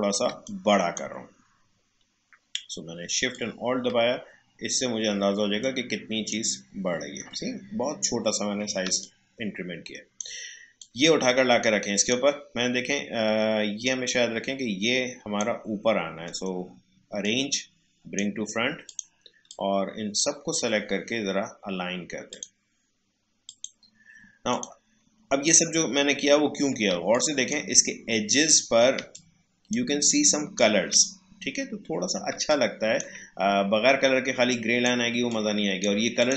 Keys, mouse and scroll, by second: 0.3 space, 0.4 click, 0.7 space, 3.3-7.7 shift+drag, 7.7 alt+scroll down 1, 8.8 space, 9.0 click, 9.3 h, 9.3 space, 10.8-16.2 drag, 16.2 right click, 17.2-22.3 drag, 25.9 alt+scroll up 1, 26.9 space, 27.1 click, 27.4 space, 27.8 alt+scroll up 1, 28.9 space, 29.1 click, 29.4 space, 30.0 click, 30.2 space, 31.0 alt+scroll down 1, 32.3 space, 32.4 click, 32.6 click, 32.8 space, 33.3 alt+scroll down 1, 34.5-36.2 drag.